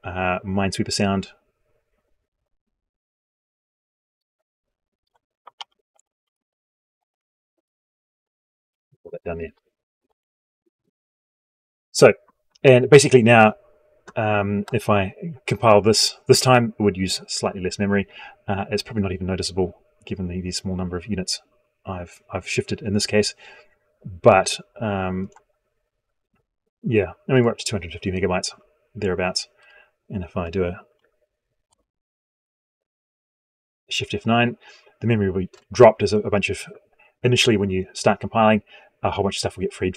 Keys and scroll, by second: 6.6 ctrl+x, 8.9 ctrl+v, 31.6 shift+F9.